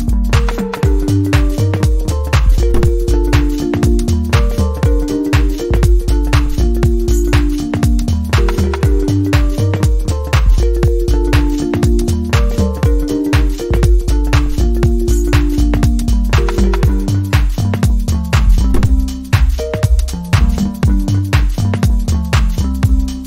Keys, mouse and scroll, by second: 2.8 double click, 5.9-10.7 typing, 11.5 Return.